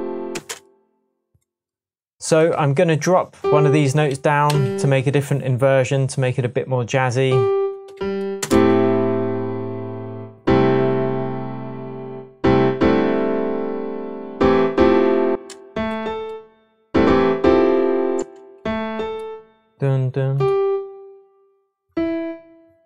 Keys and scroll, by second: 0.3 space, 4.5 Down, 7.9 Down, 8.4 space, 9.2 space, 15.3 space, 15.9 shift+space, 16.0 shift+Up, 18.1 space, 18.8 shift+space, 18.9 Up.